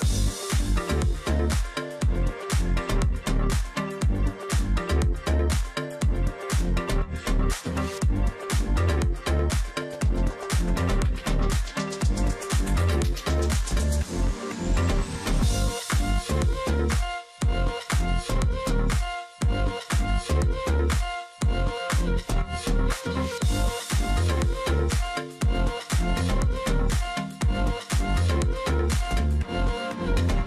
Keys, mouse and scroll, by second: 0.6 double click, 0.7 alt+scroll down 1, 1.0 space, 1.5 alt+scroll down 1, 1.6 space, 2.2-2.5 alt+scroll up 1, 2.5 alt+scroll down 1, 2.7-3.7 alt+scroll up 1, 3.7 ctrl+click, 5.2-5.8 alt+scroll up 1, 7.0 alt+click, 7.2 alt+scroll down 1, 7.4 alt+scroll up 1, 7.7 space, 10.4 shift+click, 13.5 double click, 14.1 ctrl+z, 17.4-17.9 alt+scroll down 1, 18.7 ctrl+z, 18.9 ctrl+click, 20.4-20.9 alt+scroll up 1, 21.4 Delete, 22.0 alt+scroll down 1, 22.4-23.0 alt+scroll up 1, 24.7 Delete, 25.5-26.1 alt+scroll up 1, 26.2 space, 27.0 ctrl+z, 28.0 alt+click.